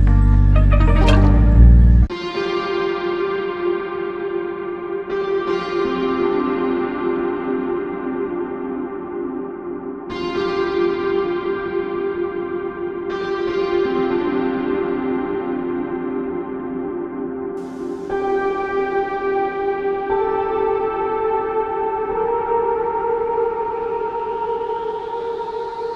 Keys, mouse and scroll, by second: 6.7 typing, 8.0 typing, 16.0 double click, 20.1 double click, 21.8 alt+click, 23.5 alt+click, 25.8 double click.